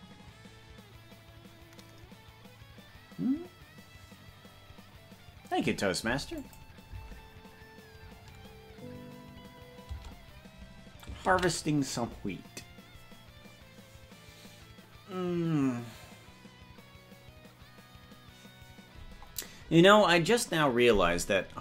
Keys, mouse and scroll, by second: 6.5 click, 7.1 space, 10.1 space, 14.7 ctrl+s.